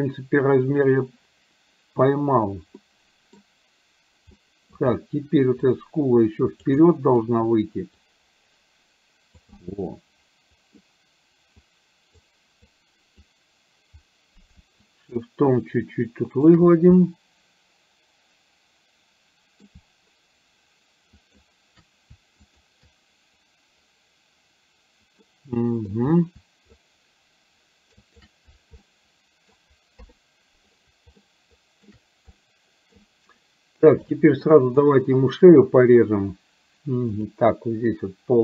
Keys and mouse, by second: 2.9 middle click, 4.4 middle click, 5.6-6.8 drag, 6.8 middle click, 8.0-9.4 drag, 9.6-10.9 middle drag, 11.6 click, 12.8 click, 14.9 shift+click, 15.6 shift+click, 17.0-19.6 middle drag, 21.1 shift+click, 22.5 shift+click, 25.3 middle click, 26.8-28.1 shift+drag, 28.9 middle click, 30.0 KP_1, 31.3 shift+middle click, 32.4 middle click, 34.5 middle click, 37.3 click.